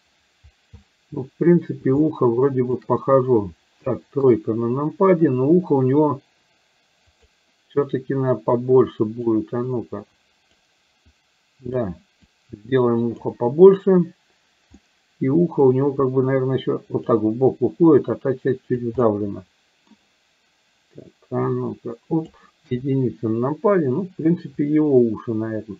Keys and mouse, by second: 2.1 shift+middle click, 4.3 KP_3, 7.3 click, 8.5 click, 9.8 click, 11.1 click, 12.3-13.3 drag, 14.9 middle click, 16.5 click, 17.9-18.9 drag, 19.0 middle click, 21.5 click, 22.6 KP_1.